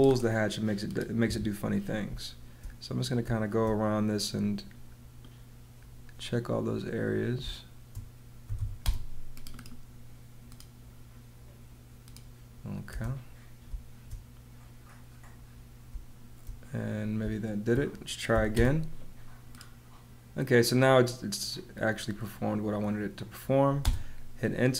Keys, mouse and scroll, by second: 1.2 Escape, 2.0 space, 7.3-9.0 typing, 12.8 space, 15.8 space, 17.1 space, 18.3 h, 18.5 space, 23.8 space.